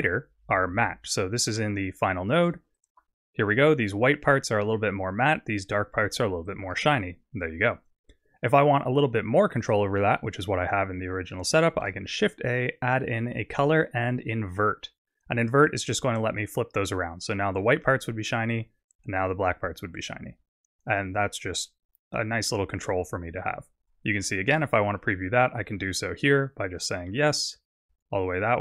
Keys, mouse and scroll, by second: 2.8 ctrl+shift+click, 6.5 ctrl+shift+click, 11.8 shift+a, 16.0 click, 24.8 ctrl+shift+click, 26.3 click.